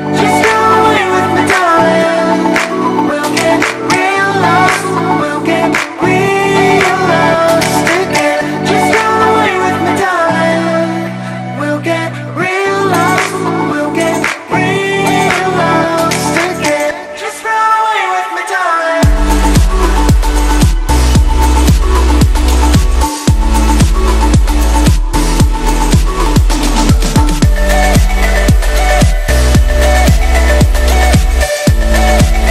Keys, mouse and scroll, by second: 0.1-0.6 space, 0.9 click, 1.2-2.0 space, 2.2-2.6 click, 2.4 space, 3.8-4.2 click, 4.0 space, 5.5 click, 6.5-8.6 typing, 11.5 click, 13.0-14.5 shift+drag, 16.0-16.5 shift+drag, 17.8-18.4 shift+drag, 19.5 Down, 21.3-23.9 drag, 24.3 space, 24.5-24.9 click, 24.7 space, 25.9 click, 27.1-28.3 typing, 28.4 Down.